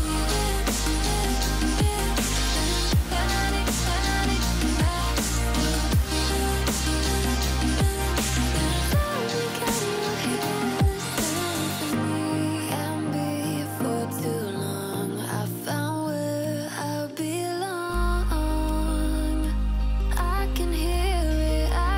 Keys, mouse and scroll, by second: 0.3-0.7 alt+scroll down 1, 0.7-1.2 alt+scroll up 1, 1.3 click, 9.1 click, 14.1 F7, 14.5 click, 16.9 click, 20.8 click.